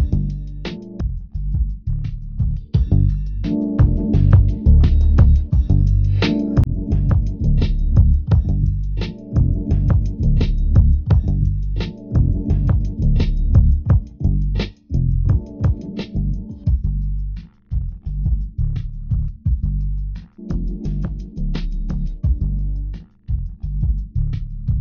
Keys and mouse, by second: 13.0 Tab, 14.0 z.